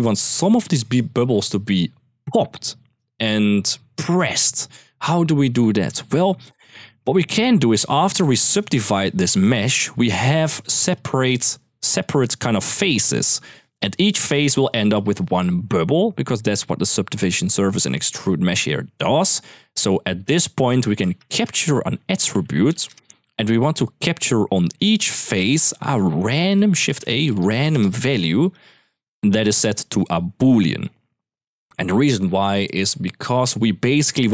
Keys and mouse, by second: 6.9 middle click, 7.5 middle click, 7.9 click, 8.4 g, 9.2 click, 10.7 shift+click, 11.7 click, 13.8 click, 16.9-17.5 drag, 19.4 ctrl+x, 20.8 shift+a, 23.3 click, 23.6 middle click, 24.4 click, 24.7-25.3 drag, 25.6 middle click, 26.1 shift+a, 28.7 click, 29.4-30.6 drag, 31.2 drag, 33.9-34.3 middle drag.